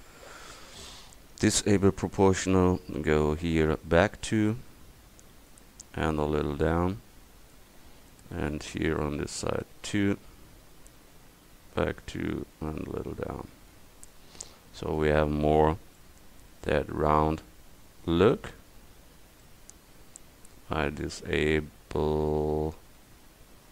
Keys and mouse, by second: 1.3-5.5 drag, 6.2-8.6 drag, 8.6 a, 9.0 c, 11.2 click, 14.5 middle click, 15.3 Tab, 18.8 Tab.